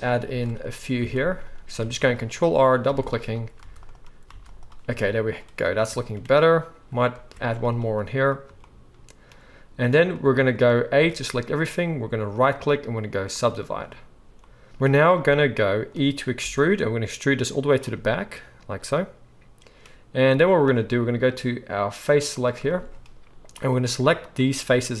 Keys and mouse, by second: 0.2 ctrl+r, 1.1 ctrl+r, 1.8 ctrl+r, 2.8 ctrl+r, 3.6 ctrl+r, 4.4 ctrl+r, 7.1 ctrl+r, 11.0 a, 12.3-22.4 right drag, 16.4 e, 22.4-23.6 shift+middle drag, 23.6-25.0 right drag.